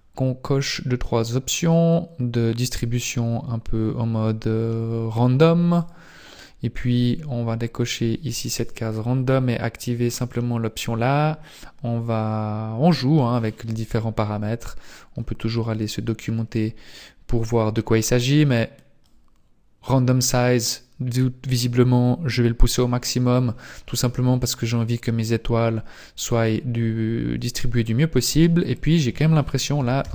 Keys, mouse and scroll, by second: 1.6 click, 1.6 scroll up 8, 5.8 click, 18.2 click, 18.2 scroll down 3.